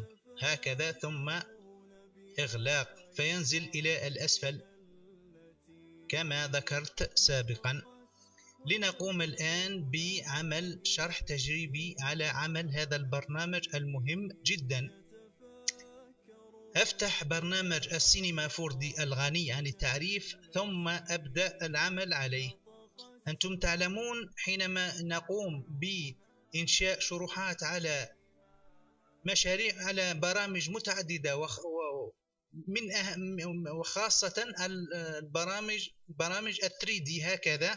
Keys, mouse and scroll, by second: 1.4-2.4 drag, 4.1-5.2 drag, 5.5-9.5 drag, 14.8-15.9 drag.